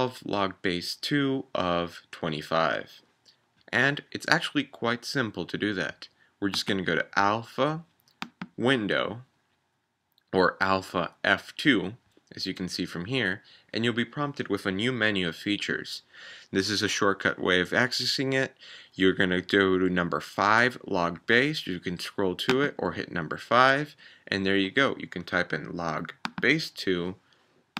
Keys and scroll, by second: 22.5 5.